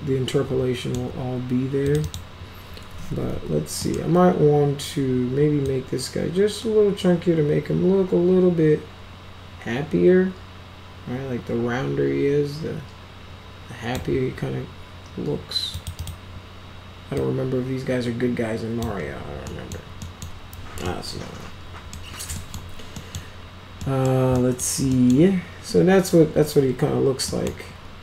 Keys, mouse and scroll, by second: 1.8 click, 2.0 click, 2.8-3.8 typing, 3.7 middle click, 5.6-13.9 drag, 15.7 click, 15.9 click, 17.1-18.7 drag, 19.4 middle click, 19.9 middle click, 20.8-21.9 middle drag, 22.3 middle click, 22.9 middle click, 23.7 middle drag, 24.3 middle drag, 24.8 middle click, 27.2 middle drag.